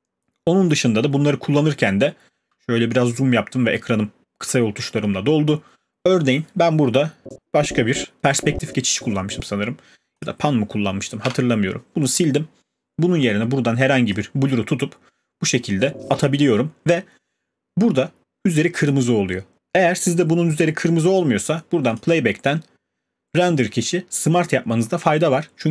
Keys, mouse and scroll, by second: 1.5-2.2 alt+scroll, 7.2 alt+scroll, 9.5 click, 11.2 BackSpace, 14.1 click, 16.1 click, 21.1 click, 22.0 click.